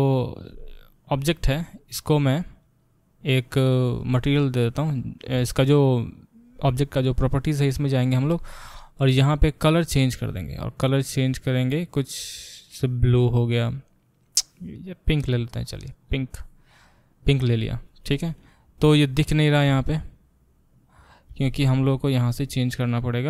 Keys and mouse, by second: 2.9-3.5 middle drag, 3.5 click, 3.6-23.2 middle drag, 18.4 Tab, 22.0-23.2 drag.